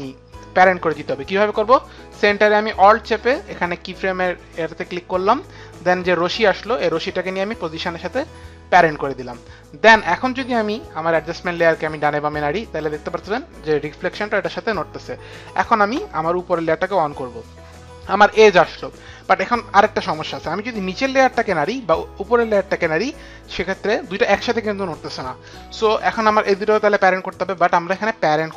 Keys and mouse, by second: 3.6 alt+click, 6.2 alt+click, 10.4 click, 11.6 click, 14.7 ctrl+z, 14.7 click, 16.8 click, 21.2 click, 25.9 ctrl+z, 27.6 ctrl+z, 27.6 click.